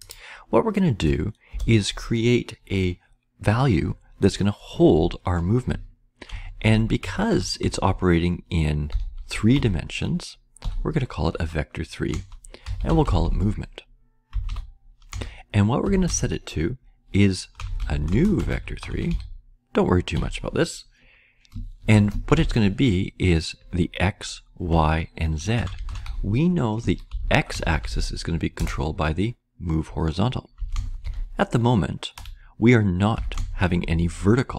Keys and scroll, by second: 0.9 Return, 1.4 Return, 5.9-15.7 typing, 17.5-20.6 typing, 21.6-22.4 typing, 25.3-28.5 typing, 30.3-33.1 typing.